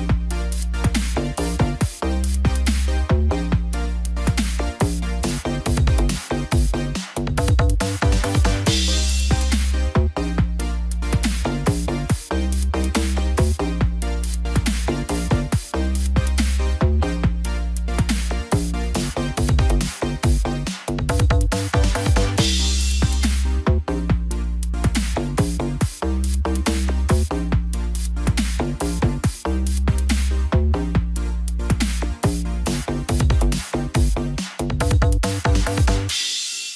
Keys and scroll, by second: 15.0 ctrl+g, 18.2 ctrl+j, 24.9 ctrl+j.